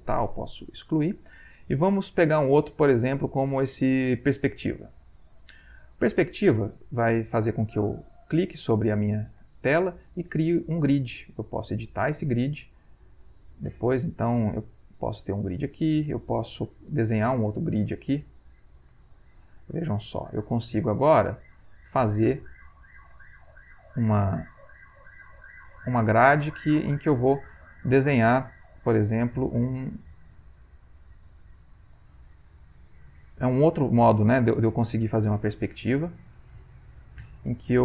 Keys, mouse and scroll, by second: 0.3 click, 1.7-5.6 drag, 7.0 click, 8.2 click, 9.4 click, 11.8 click, 13.2-14.5 drag, 14.9 click, 16.5 click, 17.7 click, 20.4-23.2 drag, 23.4-24.9 ctrl+middle drag, 24.9-33.0 drag, 33.0-34.4 ctrl+middle drag, 33.0 ctrl+scroll, 34.4-35.7 drag, 36.3 click, 37.5-37.8 drag.